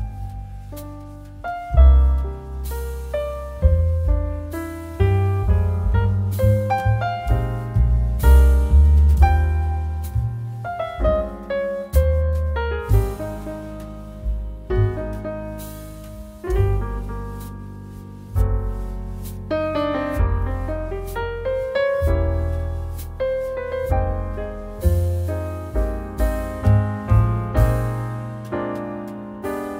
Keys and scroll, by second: 7.0 ctrl+-, 7.7-8.1 space.